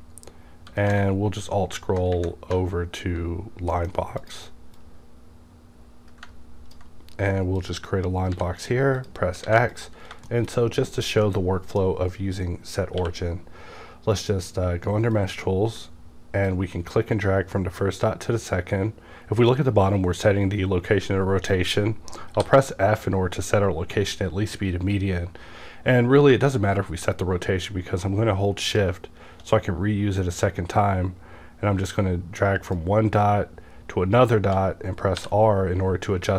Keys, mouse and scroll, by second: 1.2-1.6 alt+scroll up 1, 3.5 scroll down 2, 3.7-4.2 middle drag, 4.2-7.6 drag, 8.3 x, 9.0 click, 9.4 alt+a, 9.7 click, 10.3 shift+middle click, 10.4 shift+scroll down 1, 11.2-15.1 middle drag, 13.0 q, 15.1 click, 16.5-32.7 drag, 22.3 f, 32.7-36.3 drag, 35.2 r.